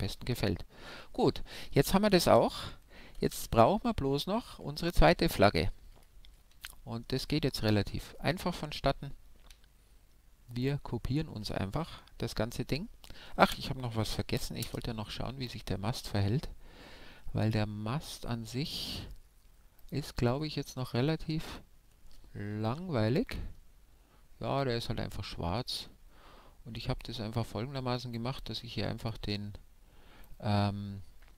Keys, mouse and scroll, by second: 3.4 alt+z, 4.4-5.1 scroll down 1, 5.1-10.7 middle drag, 10.7-14.6 right drag, 14.6 KP_0, 18.7-22.7 drag, 22.7 Home, 24.2-27.1 middle drag, 25.4-26.1 scroll down 1, 27.1-28.7 drag, 29.1-30.6 drag.